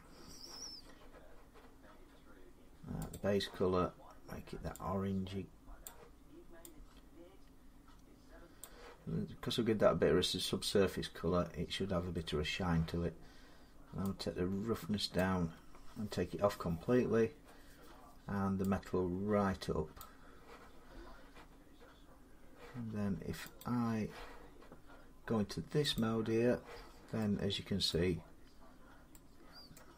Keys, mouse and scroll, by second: 2.9 click, 5.6 click, 8.4 click, 15.0 click, 19.8 click, 23.4 click, 25.8 click, 27.7 middle click, 28.0-28.4 scroll, 28.6-28.9 scroll up 3, 29.6 middle click, 29.6 scroll.